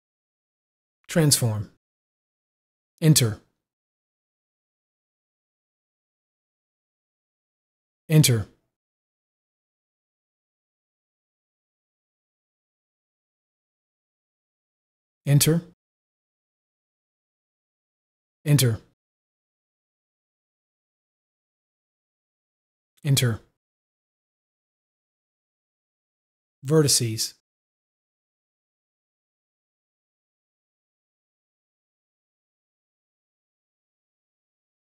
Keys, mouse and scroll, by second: 4.3 Return, 8.7 Return, 9.2 click, 15.7 Return, 15.7 click, 18.9 Return, 19.1 click, 23.5 Return, 23.6 click, 27.6 u, 29.4 click, 29.8 Left, 31.8 click, 32.6 click.